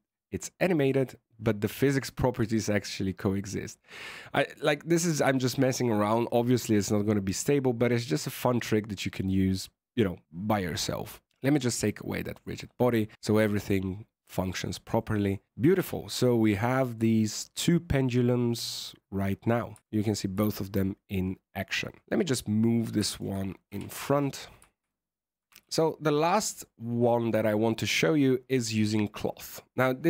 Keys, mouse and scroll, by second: 7.7 click, 11.2 click, 12.2 click, 13.1 right click, 14.3 middle click, 14.9 middle click, 15.7 KP_1, 16.4-17.0 scroll down 7, 17.0 shift+middle click, 17.4-18.7 scroll up 5, 18.7 middle click, 19.7 shift+middle click, 19.9 scroll up 1, 20.3 a, 22.0 alt+a, 22.7 right click, 23.0 shift+right click, 23.6 KP_1, 24.6 shift+middle click, 24.8 shift+middle click, 25.5 alt+a, 25.5 click, 28.5 right click.